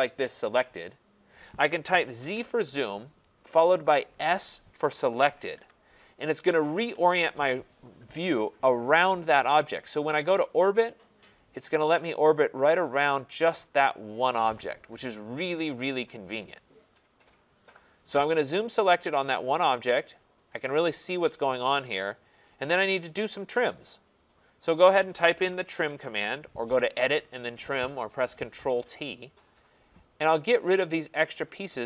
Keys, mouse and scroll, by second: 0.4 middle click, 2.2 z, 2.5 Return, 5.0-5.4 scroll, 5.6 s, 6.7 Return, 8.1 scroll, 9.6-11.6 middle drag, 12.9 middle click, 22.7-24.1 right drag, 24.7 right click, 25.5-26.6 typing, 29.8 click.